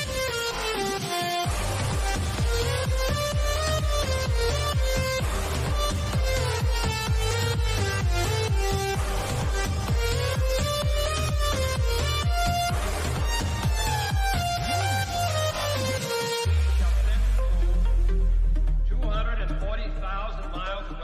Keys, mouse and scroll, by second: 1.6 scroll down 1, 2.2 scroll down 1, 4.1 click, 5.2-5.6 scroll down 1, 6.6 scroll up 1, 6.7-8.4 shift+middle drag, 8.4 scroll down 1, 8.9-10.9 middle drag, 10.9 middle click, 11.9-12.5 scroll up 1, 12.5-14.3 middle drag, 14.3-18.6 shift+middle drag, 18.6 click, 20.7 typing.